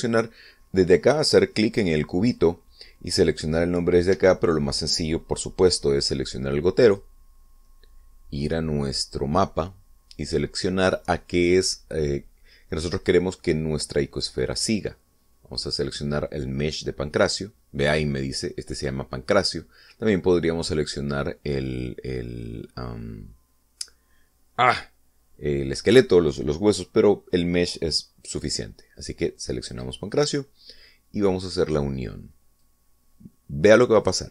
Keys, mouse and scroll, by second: 3.2 click, 5.1 Escape, 7.8 click, 30.7 click, 33.6-34.3 drag.